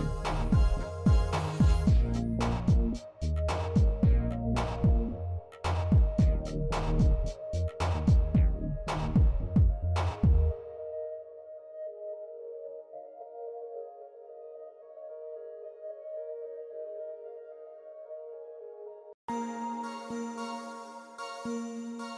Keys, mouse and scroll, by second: 0.1 2, 1.5 middle click, 2.8 click, 6.5 alt+click, 7.9-9.0 drag, 9.5 middle click, 10.0 s, 11.9 Tab, 12.6-15.5 middle drag, 15.8 shift+middle drag, 17.4-18.8 drag, 19.5-19.8 middle drag, 20.1 shift+middle drag, 21.8-22.1 right drag.